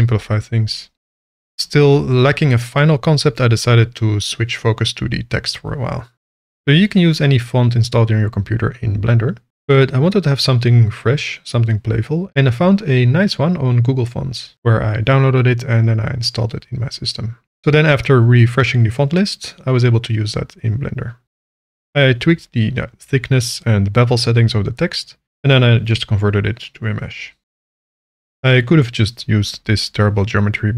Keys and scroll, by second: 0.5 ctrl+b, 1.1 p, 2.0 shift+a, 4.6 r, 4.8 x, 5.0 KP_9, 5.3 Return, 5.6 Tab, 20.5 h, 20.6 a, 20.6 n, 22.0 ctrl+z, 27.7 Tab, 28.9 a, 30.2 e.